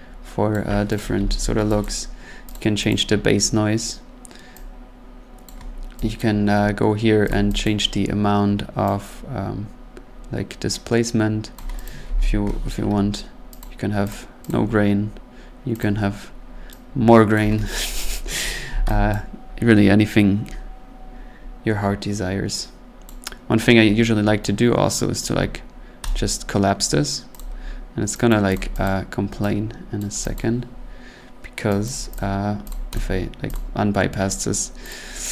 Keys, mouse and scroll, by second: 0.5 click, 0.9 click, 1.1 ctrl+z, 1.8 click, 2.5 click, 2.9 click, 5.4 click, 5.7-6.0 scroll down 2, 6.1 click, 6.5 middle click, 6.6 middle click, 7.3 click, 7.6 click, 11.5 click, 11.8 click, 12.0 ctrl+z, 13.6 click, 14.1 click, 14.5 click, 15.8 click, 17.3 click, 18.1 ctrl+z, 18.5 scroll, 19.1 click, 21.4 scroll, 23.0 click, 25.2 right click, 25.2-26.0 scroll up 2, 26.0 right click, 27.3 click, 28.3 click, 28.5 click, 28.8 click, 30.0 click, 30.3 click, 30.5-31.1 scroll, 31.8 click, 32.1 click, 32.7 click, 32.9 click, 33.5 click, 34.9 click.